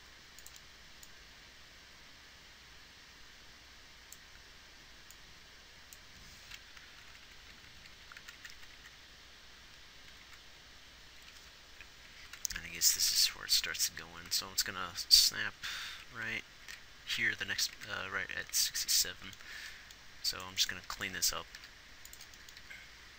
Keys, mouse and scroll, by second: 0.0 r, 7.5-8.4 Left, 8.6 Right, 9.2-10.6 Right, 11.6 Right, 12.4-12.8 Left, 13.4 Right, 13.6 Right, 13.9 Right, 14.7 Right, 16.3 Right, 16.5 Left, 16.6 Left, 18.1 Right, 21.2 g, 22.0 g, 23.0 g.